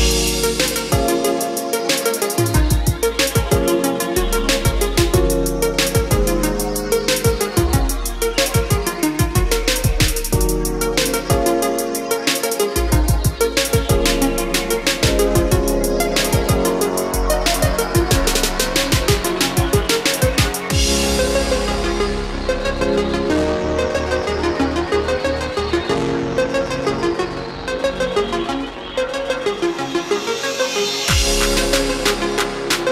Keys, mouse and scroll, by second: 0.8 click, 2.3 middle click, 3.6-4.0 scroll up 1, 5.2 click, 7.3 Escape, 7.8 click, 8.1-8.5 scroll down 1, 8.9-10.0 ctrl+drag, 16.9 middle click, 18.0-18.6 scroll up 1, 19.0 click, 19.2-19.8 scroll down 1, 19.9-20.2 scroll up 1, 20.3 scroll down 1, 21.4 ctrl+click, 22.4 click, 28.8 middle click, 30.1 click, 30.5 middle click, 31.8 ctrl+click.